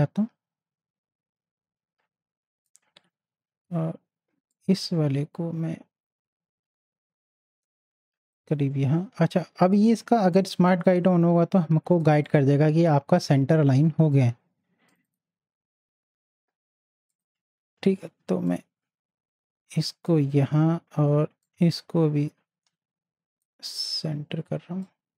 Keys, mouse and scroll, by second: 4.8-9.9 drag, 10.2-12.2 drag, 14.9-25.1 drag.